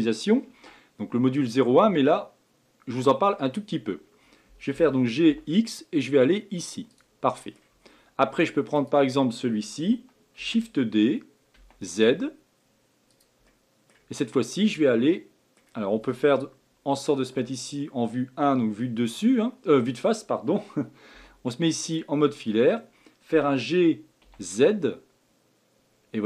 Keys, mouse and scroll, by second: 7.3 middle click, 7.8-8.7 scroll down 4, 8.7 click, 10.4 shift+d, 13.4-14.1 middle drag, 14.1 scroll up 3, 14.7-17.3 middle drag, 17.3 KP_1, 18.6-19.3 scroll down 3, 19.8-21.1 scroll up 4, 21.1 z.